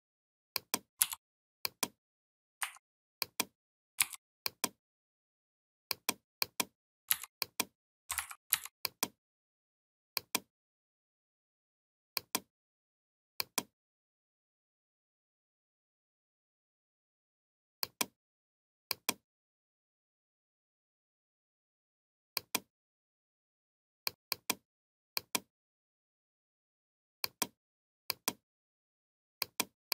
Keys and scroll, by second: 3.8 i, 6.9 v, 8.0 ctrl+z.